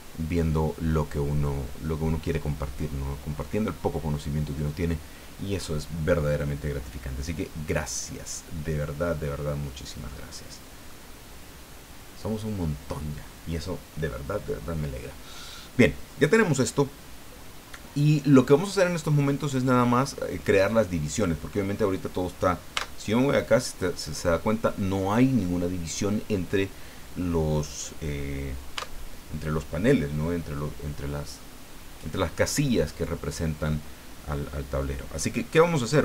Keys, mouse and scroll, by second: 7.8-9.2 drag, 9.6-11.0 drag, 11.2 scroll up 2, 11.9 scroll up 2, 22.7 Tab, 28.8 Tab.